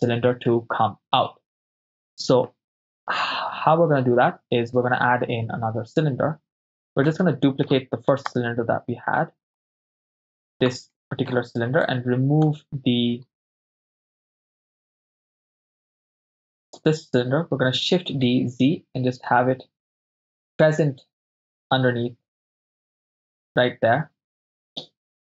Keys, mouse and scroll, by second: 7.1 ctrl+middle click, 8.5-9.6 drag, 10.9 ctrl+middle click, 12.1 click, 14.2-15.1 drag, 15.9 click, 15.9 right click, 18.2 shift+d, 18.3 z, 23.3-25.3 ctrl+drag.